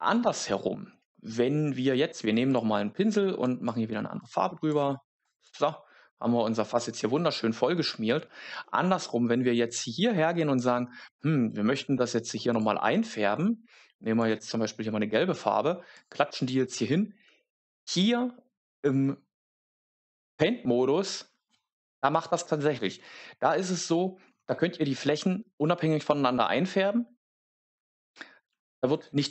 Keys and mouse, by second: 2.5 click, 3.3 click, 4.1 click, 5.1 click, 12.4 click, 13.9 click.